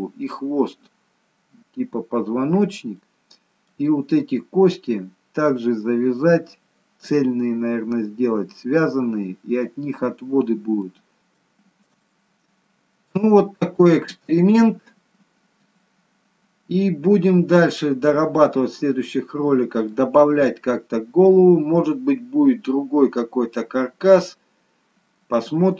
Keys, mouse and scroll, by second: 3.0 middle click, 11.0 middle click, 11.2 scroll down 2, 11.5 shift+middle click, 12.0 middle click, 13.5 middle click, 22.4-23.0 scroll up 1, 23.0 middle click.